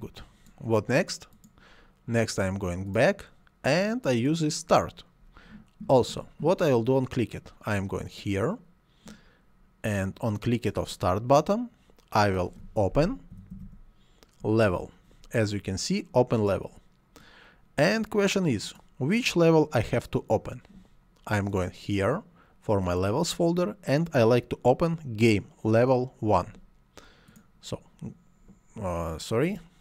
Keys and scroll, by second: 13.0-14.2 typing.